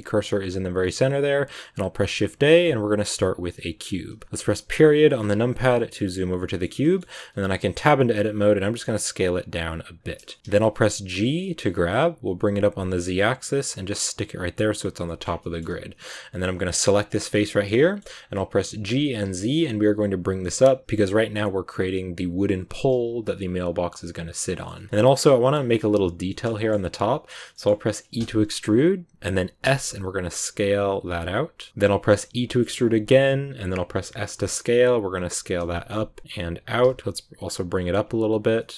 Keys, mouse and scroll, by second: 0.2 z, 0.8 shift+a, 4.5 KP_Decimal, 5.4 scroll down 2, 5.7-7.1 middle drag, 7.1 Tab, 10.2 middle click, 10.4 s, 15.0 shift+middle click, 15.2 scroll down 2, 15.3 middle click, 16.2 right click, 16.8 scroll down 2, 17.4 shift+middle click, 17.6 scroll up 1, 17.7 middle click, 18.2-18.7 scroll down 1, 18.7 g, 20.8-22.6 middle drag, 22.6 g, 24.5 shift+middle click, 25.1-26.2 scroll up 2, 25.2 middle click, 26.2 shift+middle click, 26.8-27.4 scroll up 2, 27.4 middle click, 28.1 e, 31.7-32.1 scroll down 1, 32.1 e, 38.4 scroll down 2, 38.5 middle click, 38.7 s.